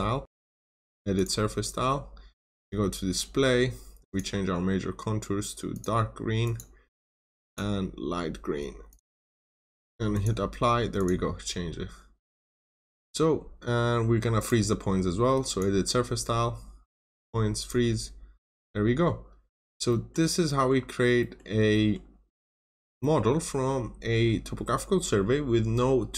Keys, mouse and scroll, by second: 0.2 click, 0.4 right click, 1.1 click, 11.5 scroll up 1, 12.1 scroll down 1, 12.4 middle click, 13.5 scroll down 1, 14.3 right click, 15.4 click, 18.3 scroll up 1, 18.7-19.2 scroll down 1, 19.2 scroll up 1, 19.8 middle click, 21.4 scroll down 1, 21.7 middle click, 23.5-25.5 scroll up 1, 25.6 scroll down 1.